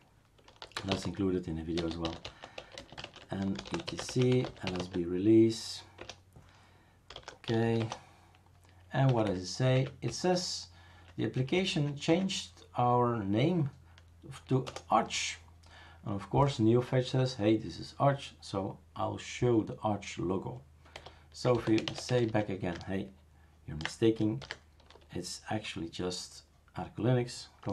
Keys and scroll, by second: 0.4-5.1 typing, 6.0 Return, 6.8-8.1 typing, 9.1 Down, 9.7 Up, 10.1 Right, 10.6 Right, 10.6-11.0 Right, 11.2 Right, 11.3 Right, 11.5 Right, 11.7 Right, 12.1 Right, 14.7 BackSpace, 20.9-22.7 typing, 24.4 ctrl+s.